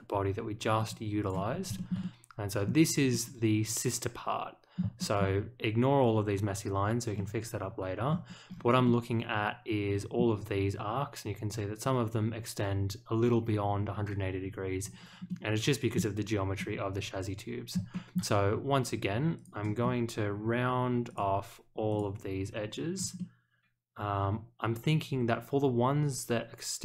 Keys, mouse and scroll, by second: 0.7 click, 1.2 click, 1.5 scroll up 1, 1.7 shift+middle click, 2.0-2.6 middle drag, 3.1-4.7 middle drag, 4.9 shift+middle click, 7.1-8.1 middle drag, 8.4 scroll down 1, 8.8-10.1 middle drag, 14.8-15.2 scroll up 1, 15.2 middle click, 16.5-17.7 middle drag, 17.9 shift+middle click, 19.3 click, 19.8-21.0 scroll down 1, 21.0 click, 21.9 ctrl+click, 23.1-26.8 middle drag.